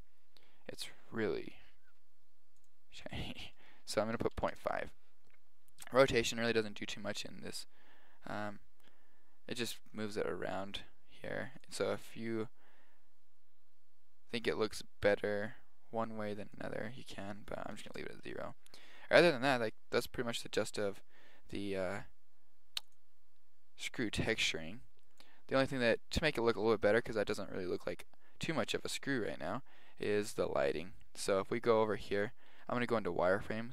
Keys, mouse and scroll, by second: 0.9 click, 2.8-4.5 drag, 6.4-8.3 drag, 11.8-12.9 drag, 13.3 click, 17.4-18.9 drag, 19.4-21.8 middle drag, 30.3-31.3 drag, 31.3 KP_7, 32.6 z, 32.8 click, 33.0 click, 33.2 click.